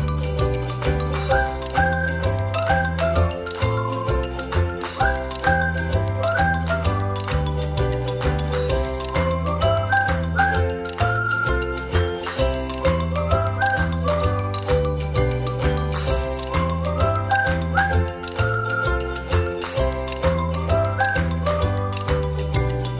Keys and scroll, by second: 3.3 shift+space, 7.7 space.